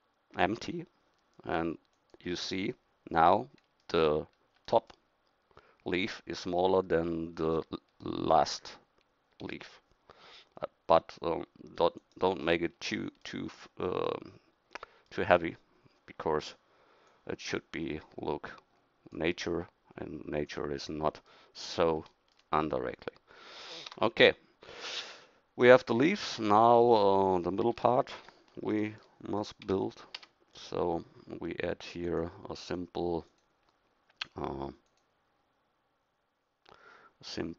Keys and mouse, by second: 2.3-3.4 middle drag, 7.5 middle click, 9.4 s, 17.1-19.2 right drag, 23.9 Tab, 24.9 a, 27.8 KP_1, 29.7 a, 30.2 a.